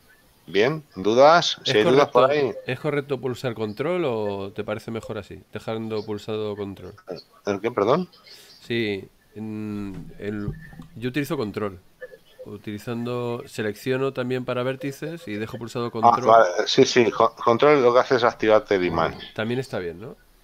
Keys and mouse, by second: 0.2 middle click, 0.7 shift+middle click, 7.7 middle click, 20.1 shift+right click.